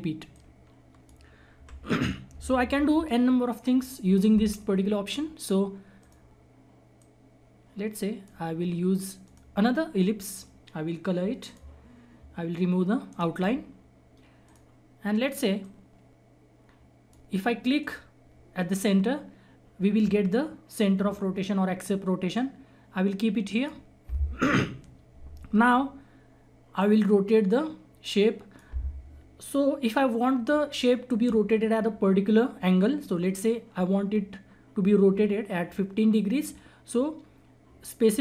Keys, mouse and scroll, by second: 0.2 click, 1.5 Delete, 2.7 F4, 5.9-11.4 drag, 13.0 right click, 14.4-17.8 drag, 22.3-26.3 drag, 26.8-31.0 drag.